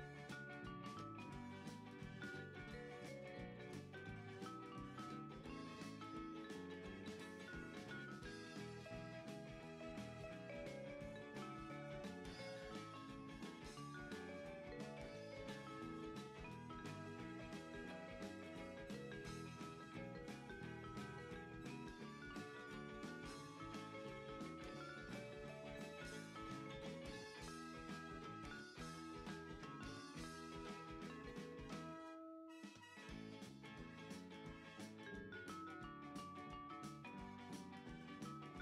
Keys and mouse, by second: 0.1 click, 0.6 Tab, 1.9 click, 3.7 x, 4.5 click, 7.8 KP_3, 8.9 r, 9.9 click, 10.0 g, 10.7 click, 10.9 r, 12.7 click, 13.0 s, 14.1 click, 14.4 g, 15.6 click, 16.0 s, 17.9 click, 18.4 g, 19.5 click, 20.3 KP_1, 22.5 KP_3, 23.5 click, 24.5 g, 28.3 click, 28.7 Tab, 29.3 right click, 29.7 click, 31.1 middle click, 32.7 KP_1, 33.3 click, 34.5 shift+middle click, 37.3 click, 37.9 g.